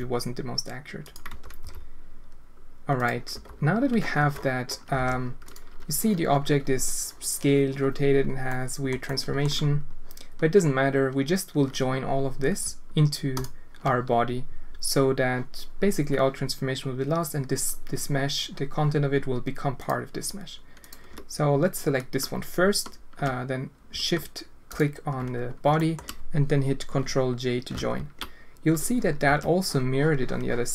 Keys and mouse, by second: 1.2 Tab, 1.6 r, 3.3 Tab, 4.1 Tab, 4.9 alt+a, 8.5-8.8 drag, 9.0-9.4 alt+shift+drag, 17.5 click, 19.7 click, 20.8 click, 25.7 shift+drag, 27.7 ctrl+j, 29.2 alt+a.